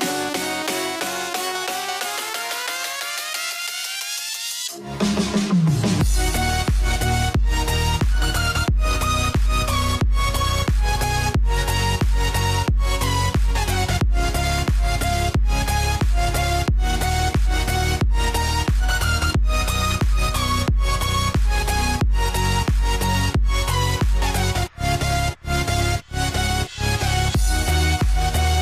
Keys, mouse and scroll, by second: 0.1-10.4 shift+drag, 13.0-15.1 drag, 19.9 click, 24.1-28.6 drag.